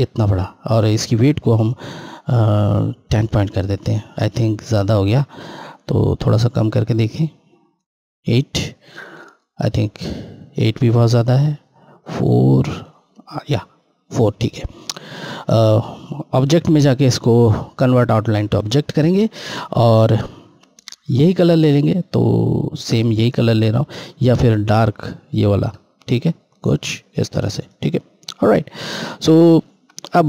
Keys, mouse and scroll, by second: 1.4 click, 8.2 click, 15.1 click, 18.0 click, 25.3 click, 27.6 Left.